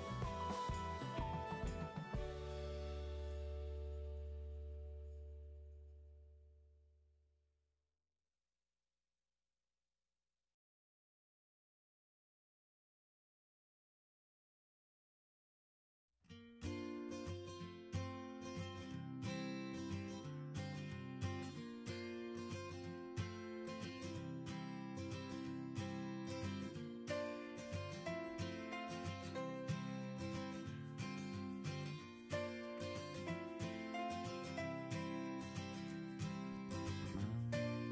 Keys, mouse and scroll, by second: 0.0-0.2 typing, 0.4 Return, 23.2 ctrl+z, 30.4-32.4 typing.